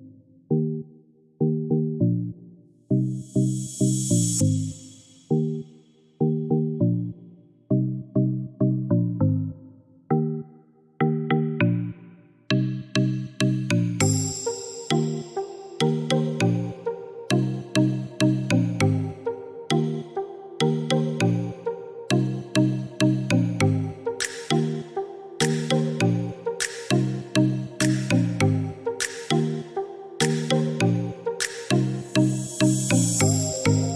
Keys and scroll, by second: 16.3 Delete.